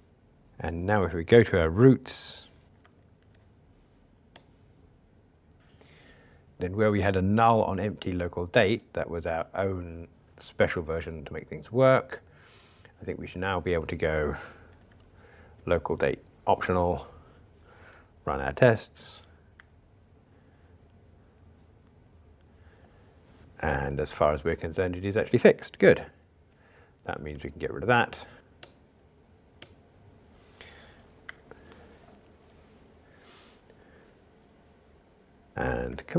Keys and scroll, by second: 2.6 alt+super+o, 8.9 super+b, 15.5 Return, 19.7 ctrl+r, 26.0 F2, 27.6 super+n, 28.4 alt+Return, 31.3 ctrl+r, 35.9 super+k.